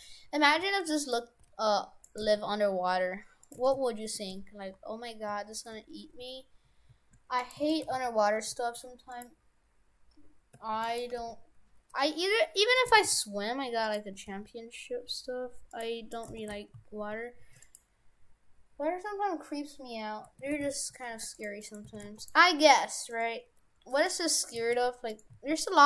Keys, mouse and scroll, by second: 1.4 g, 2.3 g, 3.6 shift+f, 7.7 shift+f, 10.8 shift+d, 11.2 g, 13.0 shift+f, 14.2 g, 16.2 right click, 16.4 shift+f, 20.5 shift+f, 21.6 right click, 21.9 shift+f, 22.8 right click, 23.2 right click, 23.4 Delete, 24.1 right click, 24.6 s, 25.4 s.